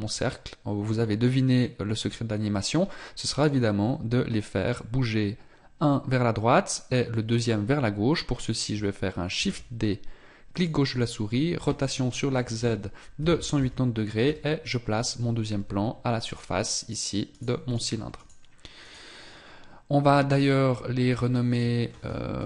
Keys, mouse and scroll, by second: 9.3 shift+d, 11.6 r, 15.5 z, 21.5 click.